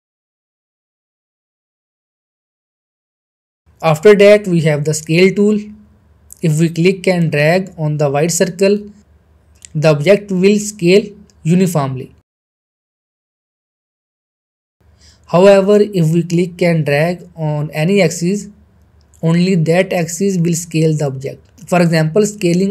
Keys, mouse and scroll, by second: 0.2 ctrl+z, 0.3 middle click, 0.7-1.1 click, 1.2 ctrl+z, 1.4 middle click, 1.8-2.2 click, 2.2 ctrl+z, 2.3 middle click, 2.6-3.1 middle click, 3.2-3.8 shift+middle drag, 5.9 click, 8.9 click, 9.0-9.8 middle click, 10.2-11.8 drag, 11.9 ctrl+z, 13.0-15.9 drag, 16.0 ctrl+z, 16.4 middle click, 18.1-22.7 drag.